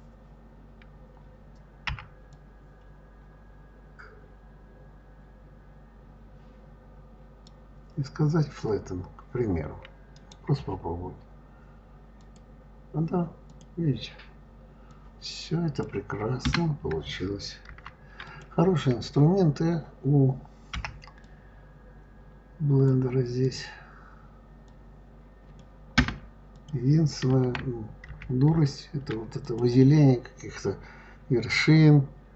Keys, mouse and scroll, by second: 1.8 b, 10.0-13.0 right drag, 13.3 click, 14.7 click, 16.3 Escape, 17.5 ctrl+z, 18.1 click, 20.6 b, 23.3 click, 24.5 click, 25.8 Escape, 26.4 click, 27.9 ctrl+z, 28.4 ctrl+z, 29.3 click.